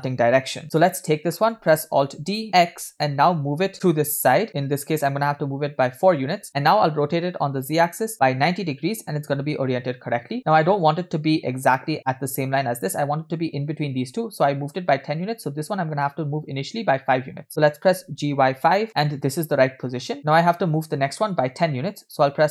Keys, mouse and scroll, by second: 20.2 shift+middle drag, 22.0 scroll down 1.